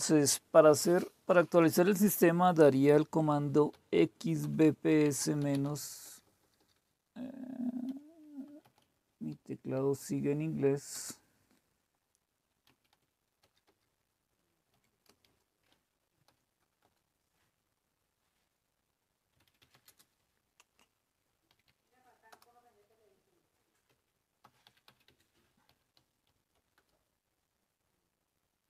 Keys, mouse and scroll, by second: 3.5-6.5 typing, 7.8-10.9 typing, 12.5-15.2 typing, 16.2 typing, 16.8 Return, 19.1-20.1 typing, 21.4-22.2 typing, 23.8-27.0 typing.